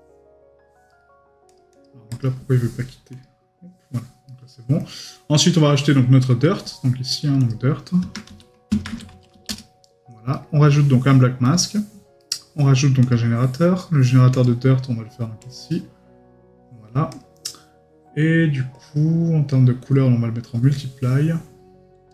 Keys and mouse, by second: 0.9 right click, 4.3 right click, 4.8 middle click, 10.3 right click, 12.2 right click, 13.8 right click.